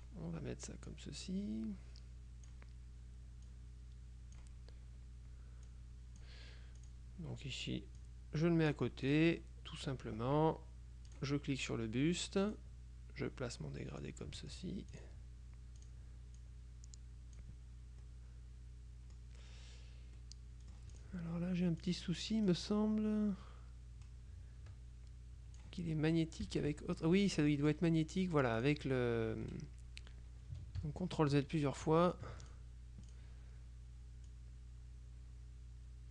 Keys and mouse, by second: 1.0-3.1 drag, 3.5-5.0 drag, 5.8-6.8 drag, 6.9 click, 8.1-9.7 drag, 9.5 right click, 11.2 click, 12.6-15.1 drag, 15.9 click, 18.1-19.7 middle drag, 20.3-21.6 drag, 21.9 click, 22.6-26.2 drag, 26.5 KP_Subtract, 27.5 click, 28.7 click, 30.9 ctrl+z, 31.9 z, 32.5 click, 34.4-36.1 drag.